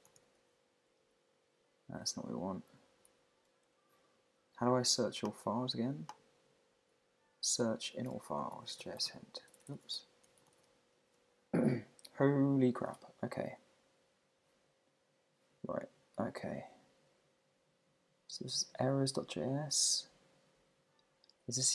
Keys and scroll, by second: 1.0 Down, 2.7 Up, 8.3 shift+1.